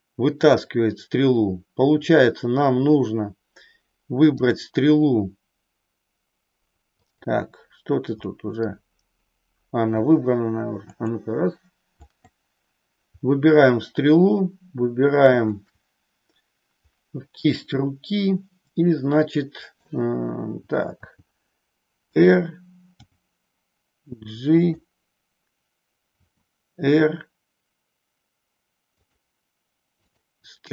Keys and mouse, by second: 0.5 click, 4.3-5.5 drag, 7.1 click, 11.0-13.2 drag, 15.3 shift+click, 17.5-20.0 middle drag, 21.0 r, 22.2 click, 23.0 g, 24.7 click, 26.1 r, 30.0 click.